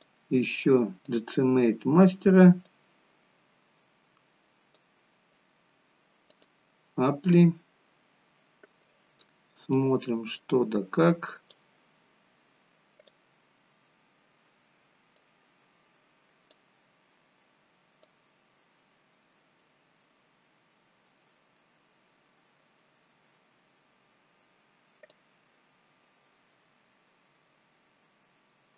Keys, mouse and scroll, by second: 6.2 click, 10.7 click, 12.1-12.4 scroll up 2, 13.2 click, 15.2 scroll down 4, 20.2 scroll down 1, 20.4 scroll up 1, 21.5 middle click, 24.4-24.8 scroll down 1, 26.5 click.